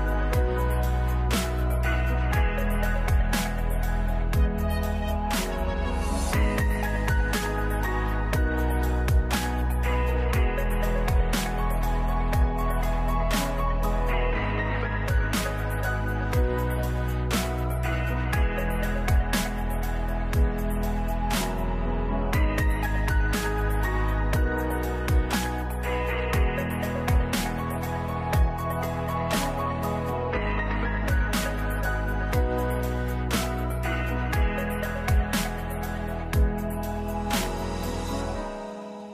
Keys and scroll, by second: 10.7 5, 12.1 ctrl+s, 13.2 ctrl+space, 23.8 ctrl+s, 29.2-30.0 typing, 32.3 ctrl+space.